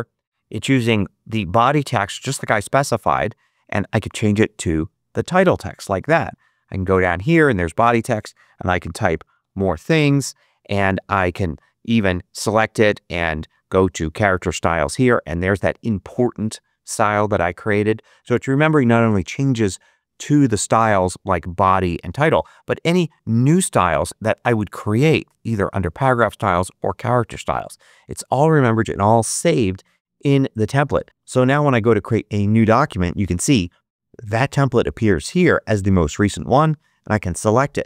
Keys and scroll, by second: 5.9 Return, 8.8-10.0 typing.